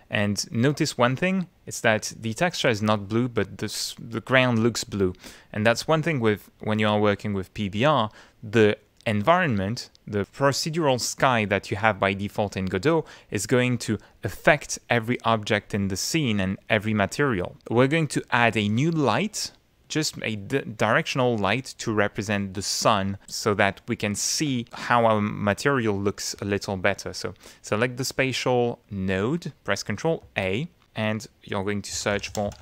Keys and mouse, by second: 8.5-10.2 middle drag, 12.1 middle click, 12.9 click, 17.6 middle click, 19.0 middle click, 23.9 click, 27.8 click, 30.2 ctrl+a, 31.7-32.6 typing.